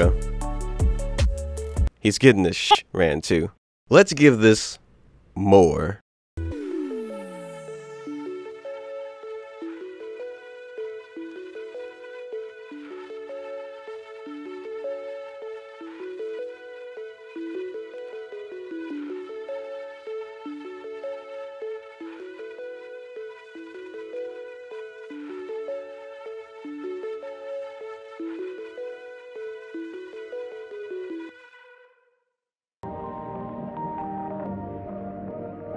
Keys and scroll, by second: 8.3 ctrl+alt+space, 8.9 ctrl+space, 9.1 ctrl+z, 9.3 ctrl+space, 9.3 ctrl+z, 9.7 ctrl+z, 10.0 ctrl+alt+space, 10.4 ctrl+z, 10.8 ctrl+alt+space, 11.3 ctrl+space, 12.4 ctrl+z, 12.8 ctrl+z, 13.0 ctrl+shift+a, 13.3 ctrl+shift+a, 13.8 ctrl+shift+a, 13.8 ctrl+alt+space, 14.1 ctrl+shift+a, 14.4 ctrl+space, 14.7 ctrl+z, 15.0 ctrl+z, 15.1 ctrl+alt+space, 15.2 ctrl+shift+a, 15.6 ctrl+space, 16.2 ctrl+space, 16.8 ctrl+alt+space, 17.4 ctrl+z, 17.7 ctrl+alt+space, 18.3 ctrl+space, 19.0 ctrl+space, 19.1 ctrl+z, 19.6 ctrl+alt+space, 20.1 ctrl+s, 20.2 ctrl+alt+space, 20.6 ctrl+a, 21.2 ctrl+space, 23.0 ctrl+z, 23.7 ctrl+a, 24.4 ctrl+space, 24.8 ctrl+z, 25.1 ctrl+z, 25.4 ctrl+z, 25.7 ctrl+z, 26.0 ctrl+z, 26.3 ctrl+z, 26.9 ctrl+alt+space, 27.5 ctrl+shift+a, 27.7 ctrl+space, 28.1 ctrl+z, 28.5 ctrl+z, 29.3 ctrl+shift+a, 29.8 ctrl+space, 30.1 ctrl+z, 30.5 ctrl+alt+space, 31.1 ctrl+alt+space, 31.2 ctrl+z, 31.4 ctrl+alt+space, 31.5 ctrl+shift+a, 31.8 ctrl+z, 32.0 ctrl+space, 34.3 ctrl+space.